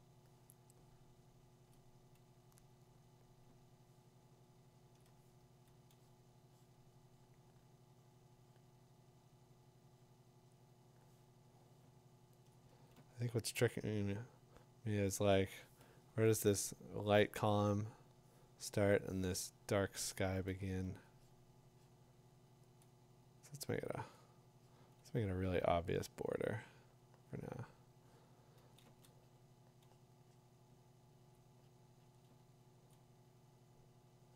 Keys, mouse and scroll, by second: 1.7 click, 4.9 click, 5.4 click, 12.5 click, 16.5 ], 16.5 [, 20.5 click, 20.8 2, 22.5 click, 22.8 click, 28.6 [, 28.8 [, 31.3 click, 32.9 click.